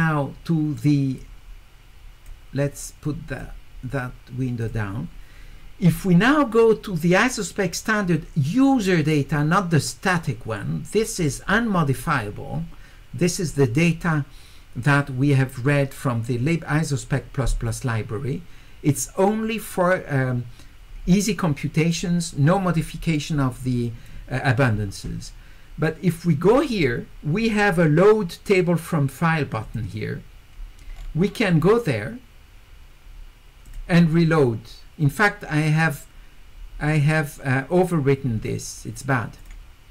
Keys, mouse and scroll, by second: 1.2-2.3 drag, 3.0 click, 4.6 click, 11.2 click, 26.4 click, 29.6 click, 30.9 scroll down 2, 31.6 scroll up 2, 33.7 click, 39.4 click.